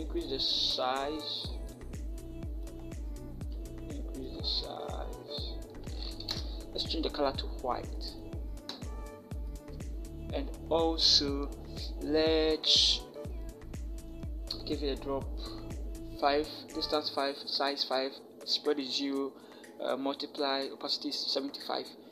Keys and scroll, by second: 6.1 Return.